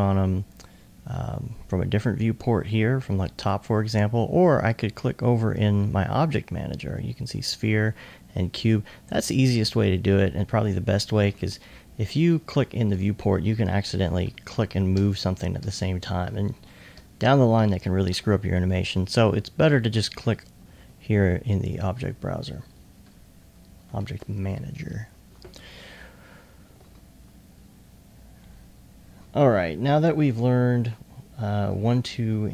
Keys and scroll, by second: 21.8 s, 23.0 typing, 24.5-25.2 typing.